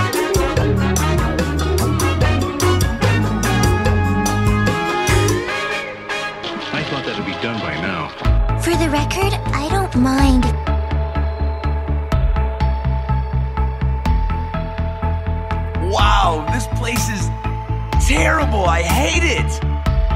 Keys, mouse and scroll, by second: 0.1 click, 4.2 click, 6.5 click, 8.2 click, 12.3 m, 15.9 click.